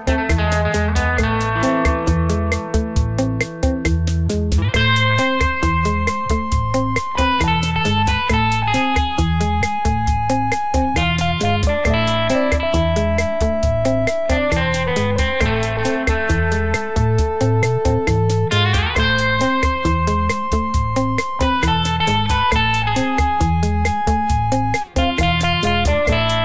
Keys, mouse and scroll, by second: 1.7-2.6 scroll down 2, 2.8 Tab, 3.4 click, 3.8 click, 5.8 click, 6.7 Tab, 6.9 click, 10.3 g, 14.6-15.1 scroll up 2, 15.0 click, 15.9 1, 16.1 click, 16.6 click, 17.2 g, 18.8 middle click, 19.8 scroll down 4, 20.0-20.4 scroll up 1, 20.4 middle click, 21.0 Tab, 21.5 scroll up 1, 22.2-22.5 scroll up 1, 22.5 click, 22.8 click, 23.9 middle click, 25.8 click.